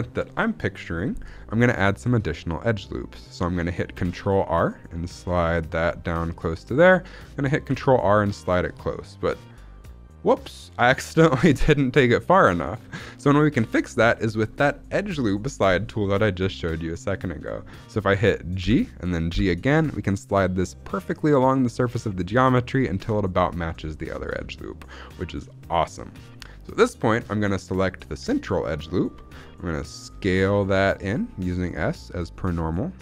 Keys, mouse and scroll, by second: 0.0-1.4 scroll up 1, 1.4 scroll up 1, 1.8 shift+middle click, 2.1-3.4 scroll up 1, 3.8 ctrl+r, 6.7 click, 7.6 ctrl+r, 8.4-9.8 drag, 11.0-12.9 scroll up 2, 13.0 shift+middle click, 13.6 scroll down 1, 14.1 shift+middle click, 16.5 shift+middle click, 17.4-18.5 scroll up 1, 18.5 g, 19.2 g, 22.8 click, 23.9 shift+middle click, 24.2 scroll down 2, 24.5 shift+middle click, 28.3 alt+click, 29.9 s.